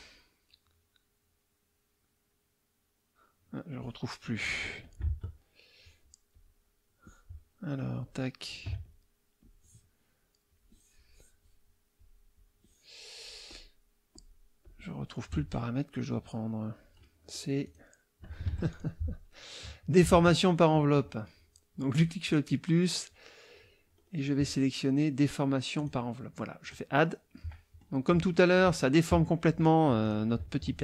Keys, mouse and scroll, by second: 4.8-5.2 alt+drag, 5.2 alt+Tab, 6.3 alt+click, 8.0 alt+click, 8.8 alt+click, 9.4 alt+click, 10.5 click, 12.0 click, 13.5 click, 14.1 click, 14.6 click, 16.1-17.6 scroll down 2, 17.6 click, 18.5 F1, 18.7 click, 20.2 alt+Tab, 21.9 click, 23.9 scroll up 2, 25.8 click, 26.6 click, 27.3 middle click, 28.3 middle click, 30.0 click.